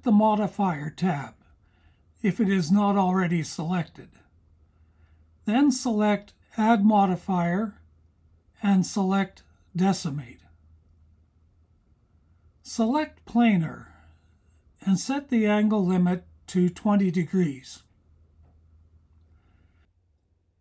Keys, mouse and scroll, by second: 11.3-14.1 drag, 17.4-20.2 drag.